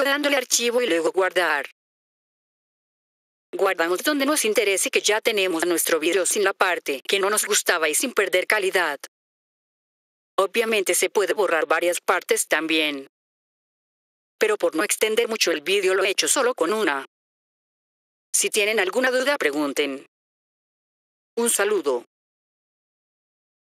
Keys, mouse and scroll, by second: 0.4-1.1 typing, 0.6 click, 6.4-7.2 typing, 12.7 click, 14.6 click, 16.5 click.